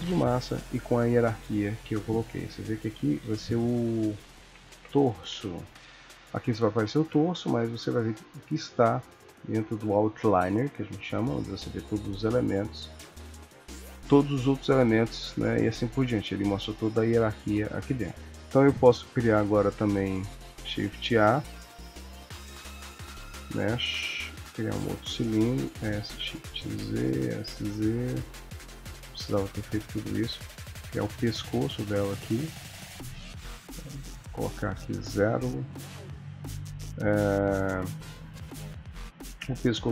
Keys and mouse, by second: 2.4 click, 3.2 F2, 6.9 click, 12.5 click, 13.4 click, 15.1 click, 16.0 click, 20.6 shift+s, 20.6 shift+a, 25.6 s, 27.2 s, 28.7 g, 34.1 click, 39.6 ctrl+middle click.